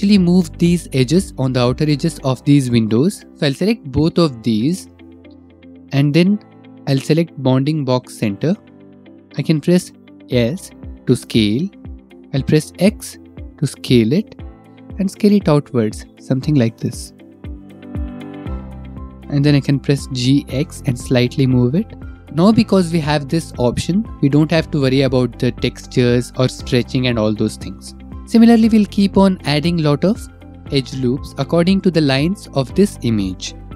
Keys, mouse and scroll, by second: 2.2 click, 3.4 shift+click, 6.4 click, 7.9 click, 10.2 s, 13.2 x, 19.5 click, 20.3 g, 20.7 x, 22.1 shift+click, 23.4 click.